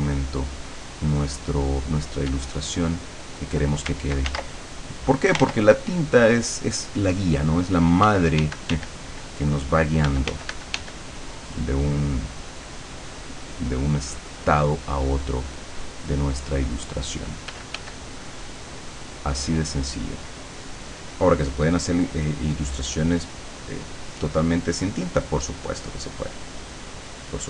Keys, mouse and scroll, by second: 2.3 d, 2.9 click, 4.3 ctrl+z, 4.8 ctrl+click, 5.4 ctrl+z, 5.8 ctrl+click, 8.0 d, 10.1 f, 11.4-17.7 drag, 17.5 f, 18.0-27.4 drag.